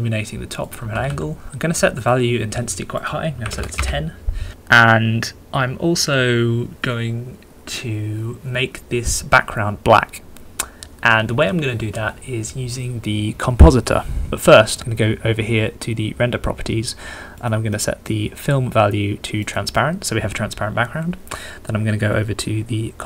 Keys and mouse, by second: 0.7 click, 0.8 r, 1.1 z, 2.0 click, 3.8-17.4 middle drag, 17.5 middle click, 17.9 click, 18.1-19.7 middle drag, 19.7-23.0 middle drag.